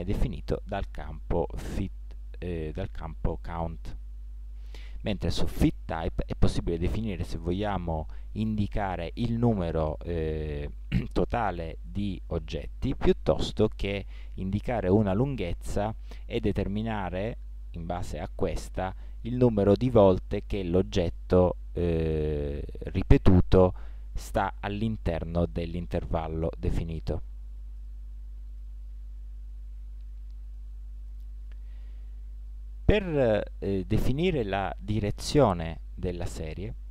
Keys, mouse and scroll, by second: 13.9-15.8 drag, 16.8-18.6 drag, 25.5-27.8 middle drag, 27.8 click, 28.2-29.3 drag, 29.3-32.5 middle drag.